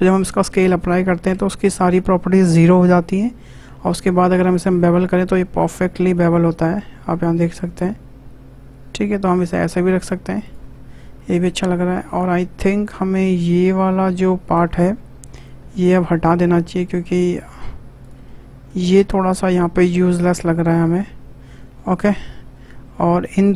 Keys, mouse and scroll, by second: 1.3 Tab, 4.1 shift+click, 5.0 ctrl+b, 10.4 click, 10.6 Tab, 10.8 scroll down 2, 11.1 middle click, 11.4 Tab, 11.6-11.9 scroll up 2, 11.9-13.5 shift+middle drag, 13.5 click, 13.8-14.9 middle drag, 14.9 3, 15.2 click, 15.7-16.8 middle drag, 16.8 shift+click, 17.2 middle click, 18.0 shift+click, 18.2-19.2 middle drag, 19.2 Delete, 20.5-22.4 middle drag, 22.4 scroll up 1, 22.6-23.5 middle drag.